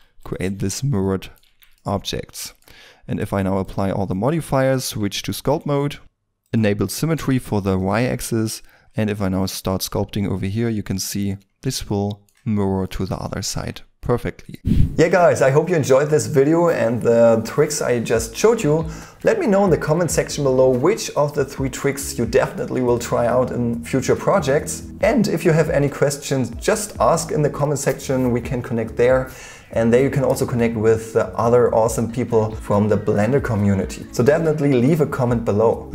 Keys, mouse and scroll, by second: 0.0-0.4 typing, 0.9 middle click, 1.4 Tab, 3.9 double click, 4.4-4.7 scroll up 1, 4.7 Tab, 5.2 shift+middle click, 6.8 middle click, 7.4-8.2 scroll up 1, 8.2 middle click, 8.2 ctrl+middle click, 8.9-10.3 scroll up 1, 11.6 scroll down 1, 13.4 Tab, 14.4 scroll down 1.